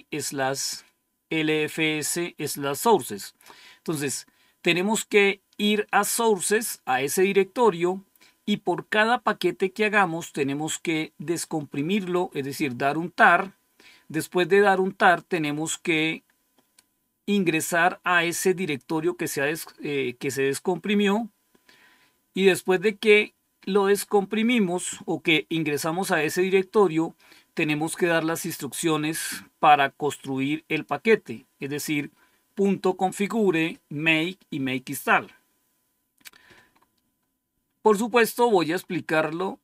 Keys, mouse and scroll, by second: 6.0 click, 11.2-12.3 drag, 15.8-26.0 scroll down 1, 26.0-26.6 scroll down 1, 28.6-31.5 drag, 36.6-37.1 scroll up 1, 37.1-37.5 scroll down 1.